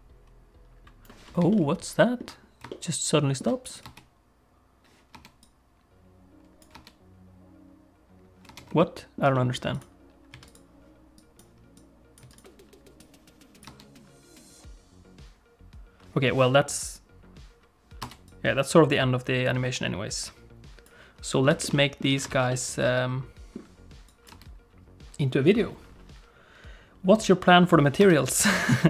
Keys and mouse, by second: 1.7 ctrl+middle click, 2.8 ctrl+middle click, 3.7 click, 3.8 space, 5.2 space, 5.5-6.7 drag, 8.6 space, 8.9 ctrl+middle click, 9.3 middle click, 9.7 click, 10.3 x, 11.2 click, 11.8 click, 12.2 x, 13.0-16.1 drag, 13.7 space, 18.1 space, 18.3-20.9 drag, 21.6 shift+middle click, 21.7 middle click, 22.1 alt+a, 22.3 ctrl+s, 22.5-23.6 middle drag, 24.1 click, 24.4 space, 28.1 space.